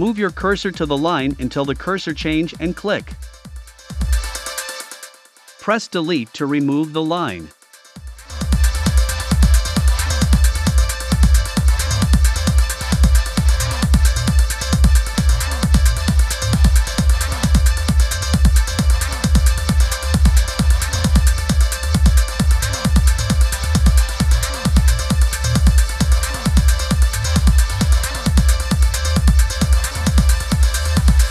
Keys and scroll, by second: 4.0 BackSpace, 8.2 BackSpace, 11.9 BackSpace, 15.1 BackSpace, 17.4 BackSpace, 19.9 BackSpace, 22.3 BackSpace, 24.8 BackSpace, 26.5 v, 31.1-31.3 typing.